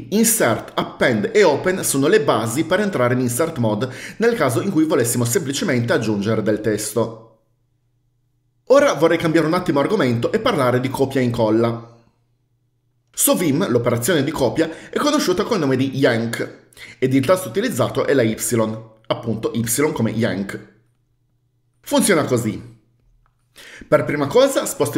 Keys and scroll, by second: 24.8-24.9 typing.